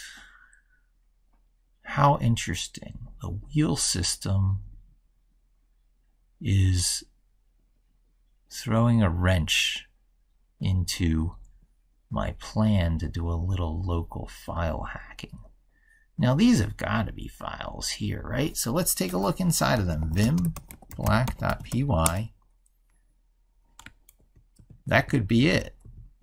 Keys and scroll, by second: 24.0 ctrl+f.